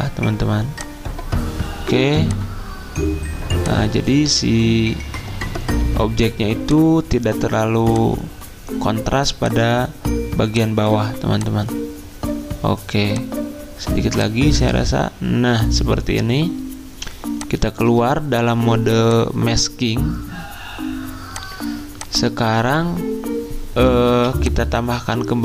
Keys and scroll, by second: 24.1 z.